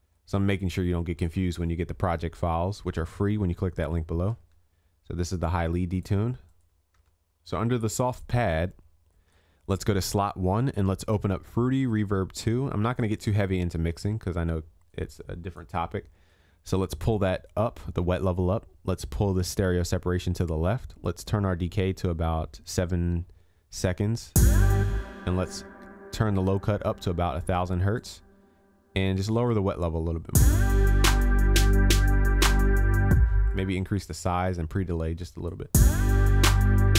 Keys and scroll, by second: 7.1 ctrl+s.